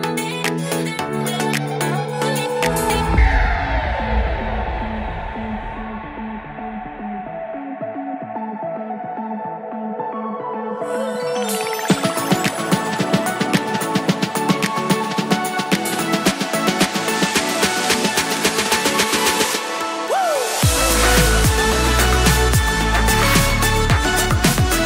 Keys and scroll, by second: 4.5 super+Left, 4.8 shift+super+Right, 5.0 super+x, 5.3 super+Right, 5.5 super+v, 5.7 super+s, 8.8 super+s.